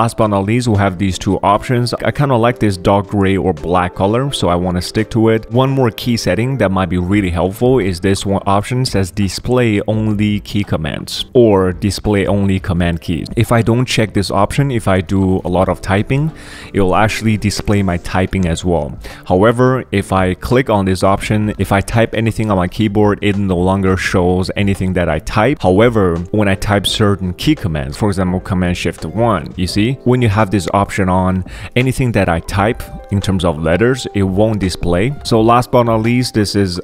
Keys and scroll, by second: 1.9 super+3, 2.2 super+1, 3.6 super+3, 4.9 super+3, 5.3 super+3, 15.0-18.3 typing, 27.4 super+1, 27.9 super+2, 28.9 shift+super+1, 35.2 ctrl+alt+super+1, 35.2 ctrl+alt+super+2.